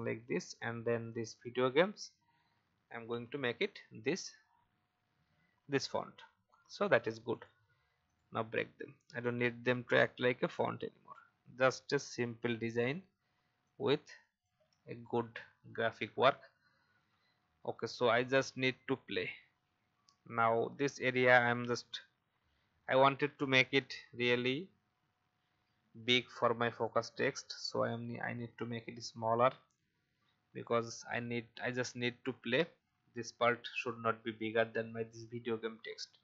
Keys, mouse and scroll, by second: 0.5 click, 2.1-2.4 scroll up 1, 3.0-3.6 scroll up 1, 3.6 click, 4.4-7.2 scroll down 1, 7.2 right click, 9.2 shift+click, 11.6 shift+click, 13.6 shift+click, 15.0-15.7 shift+Up, 26.7 click, 27.9-29.0 alt+shift+drag, 29.9 Down, 30.1 Down, 30.2 Down, 30.4 Down, 30.9 Down, 32.5 Up, 32.7 Up, 33.6 shift+click.